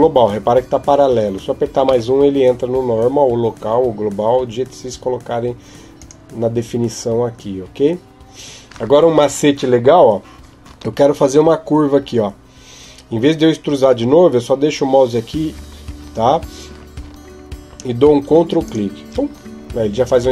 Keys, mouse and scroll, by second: 18.4 ctrl+click.